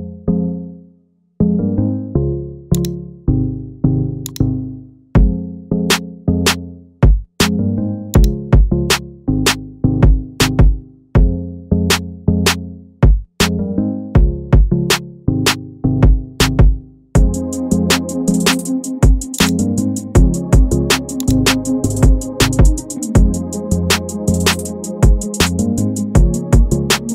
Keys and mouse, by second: 1.1 middle click, 2.8 click, 4.3 click, 8.2 click, 9.9 shift+middle click, 14.2 shift+middle click, 15.6 shift+middle click, 16.8 middle click, 17.7 shift+middle click, 19.4 click, 22.5 middle click, 23.5 shift+middle click, 25.3 middle click, 26.3 shift+middle click.